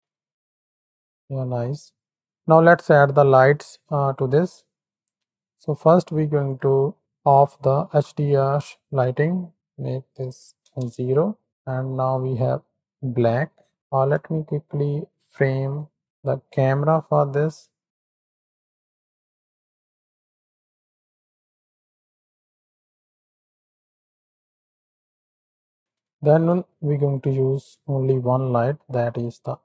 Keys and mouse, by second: 1.2 z, 3.6 click, 5.7-7.0 drag, 7.9 Home, 10.2 click, 11.9 z, 13.8 click, 14.2 shift+middle click, 16.0 z, 17.7-18.2 drag, 18.3 click, 18.8 ctrl+alt+KP_0, 19.5 n, 19.7 shift+click, 20.0 click, 20.4 ctrl+click, 20.8-21.5 ctrl+shift+drag, 21.6 click, 21.8 shift+drag, 22.3-23.7 shift+drag, 24.4 n, 24.6 click, 25.2 click, 26.2 shift+a.